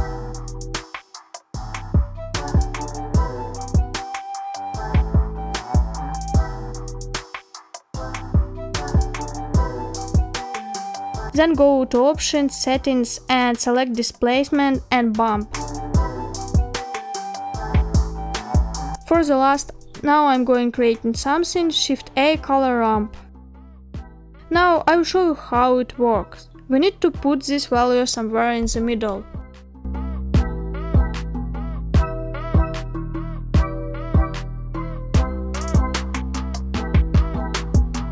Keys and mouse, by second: 1.0 click, 2.3 click, 6.7-7.3 middle drag, 8.3-9.7 middle drag, 10.9 click, 13.3 click, 15.5-17.2 drag, 17.2-19.1 middle drag, 20.6 shift+a, 27.5 middle click, 28.4 shift+middle click, 31.1-37.5 drag, 37.7-38.1 middle drag.